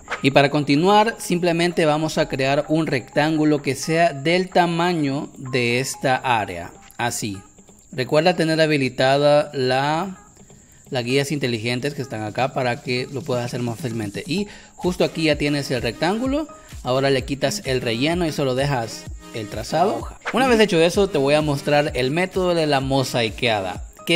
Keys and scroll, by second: 2.1 m, 14.2 v, 17.0 space.